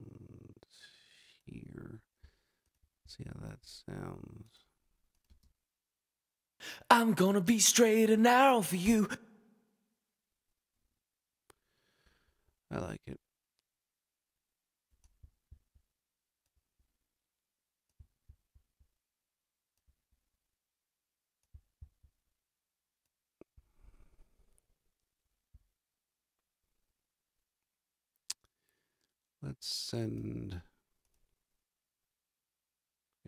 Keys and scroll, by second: 5.2 space, 8.8 space.